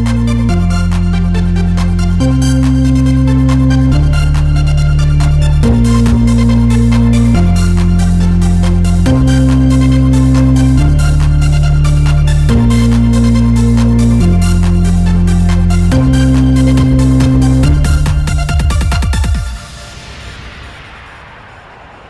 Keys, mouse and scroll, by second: 0.6 click, 2.2 click, 3.2-4.4 middle drag, 4.7 middle click, 5.6 scroll up 1, 5.7 Tab, 5.7 middle click, 6.2 scroll up 1, 6.6 middle click, 7.2 click, 8.1 click, 9.3-10.4 drag, 9.9 Tab, 10.5-14.0 drag, 14.8-16.3 drag, 18.0 click, 19.5-21.1 drag, 22.0 click.